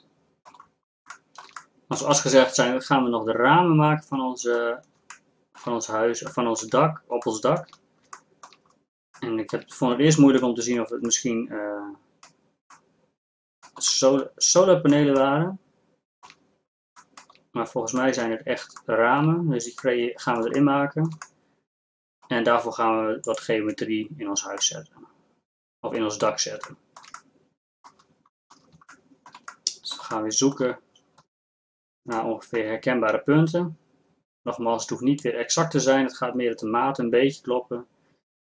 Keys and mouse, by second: 0.2 middle click, 23.3 right click, 23.7 Tab.